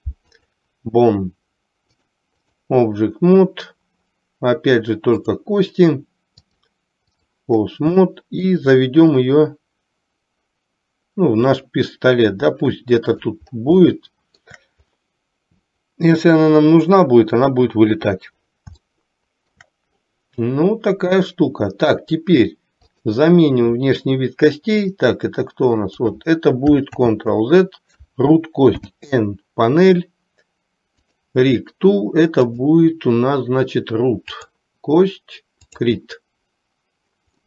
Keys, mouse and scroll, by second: 2.0-2.8 drag, 5.4 click, 6.7-7.4 drag, 8.2-8.7 shift+middle drag, 9.4-13.5 drag, 14.0-14.7 shift+middle drag, 19.2 shift+middle click, 25.0-26.2 drag, 27.0 ctrl+z, 28.8 n, 31.2 click, 32.5-34.8 drag, 35.8 click.